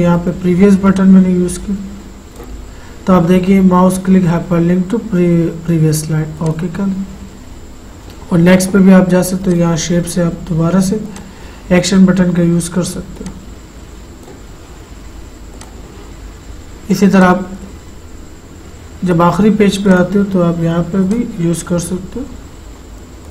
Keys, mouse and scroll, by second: 6.6 click, 9.6 click, 11.4 click, 13.5-15.7 drag, 20.1 click, 22.3-23.0 scroll down 1.